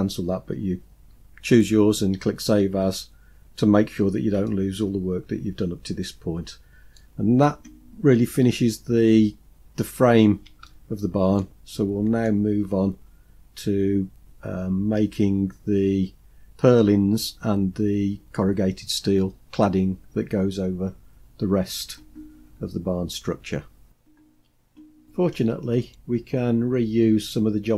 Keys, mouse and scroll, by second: 3.9 scroll down 2, 4.5-7.0 middle drag, 10.7-11.5 shift+middle drag, 11.7 middle click, 12.8-13.5 scroll up 4.